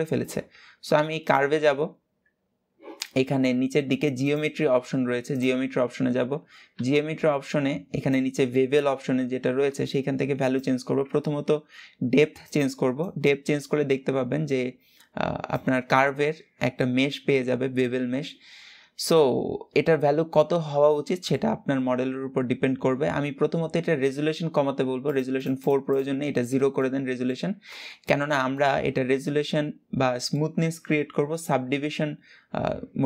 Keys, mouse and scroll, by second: 0.9 click, 1.5-2.0 scroll up 2, 3.1-3.9 scroll down 4, 3.9-5.3 drag, 5.3 scroll down 2, 12.1-15.7 drag, 15.7-18.7 shift+middle drag, 18.8-24.7 middle drag, 24.7-26.5 drag, 26.5-31.3 middle drag.